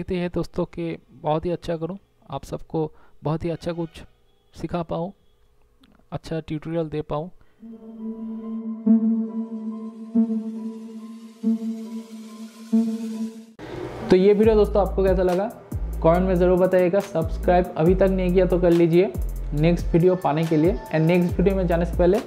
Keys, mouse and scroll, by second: 3.1 ctrl+z, 5.3 space.